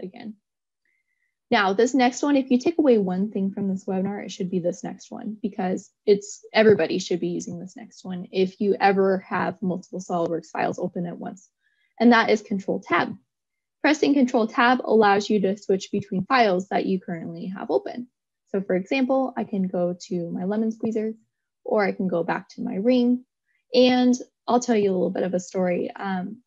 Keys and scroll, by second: 10.1 ctrl+Tab.